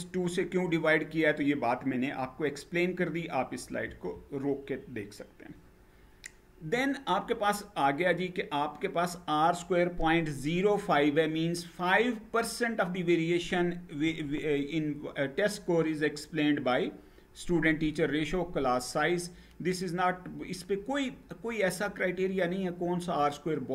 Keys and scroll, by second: 3.5 Down.